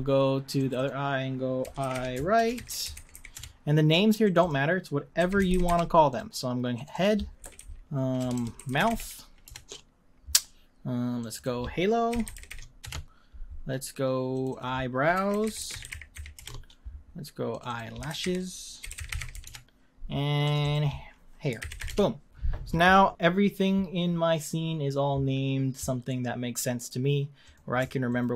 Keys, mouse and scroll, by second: 0.5 click, 2.8-3.9 drag, 4.2 click, 4.4-6.2 drag, 6.7 click, 6.9-8.3 drag, 8.3 BackSpace, 11.2-14.4 drag, 17.5 click, 18.1 e, 20.4 click, 20.6-23.4 drag, 27.4 click, 28.1 shift+click.